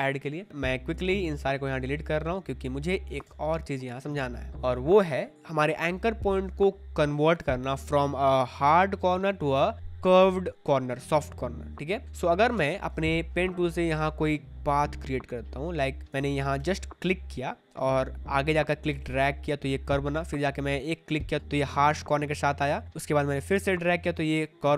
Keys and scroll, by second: 3.2 Delete, 12.5 space, 16.1 ctrl+z.